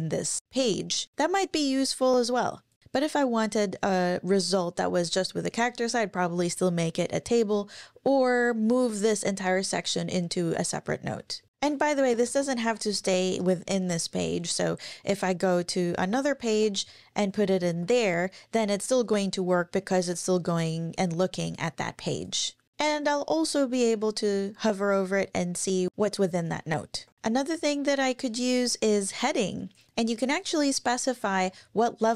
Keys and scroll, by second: 11.4 Page_Down, 11.7 super+Right, 12.2 shift+super+Left, 12.6 super+x, 12.9 BackSpace, 13.3 BackSpace, 16.5 super+v, 17.7 Up, 27.1 super+`.